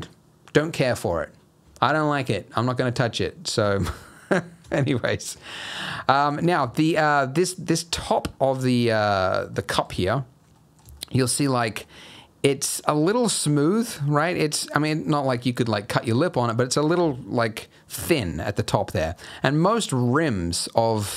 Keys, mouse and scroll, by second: 4.1 middle click, 4.4 scroll up 2, 4.7 shift+middle click, 5.1 middle click, 5.6 scroll down 1, 5.8 middle click, 6.3 scroll up 2, 6.6 shift+middle click, 7.7-8.4 scroll down 5, 8.4 middle click, 9.5 scroll up 2, 9.9 shift+middle click, 10.1-10.5 scroll up 4, 10.5 middle click, 10.8 scroll down 1, 10.9 shift+middle click, 11.6 middle click, 12.0-12.6 scroll up 1, 13.0 middle click, 14.2 scroll down 2, 14.4 middle click, 15.1 middle click, 16.3 middle click, 18.6 middle click.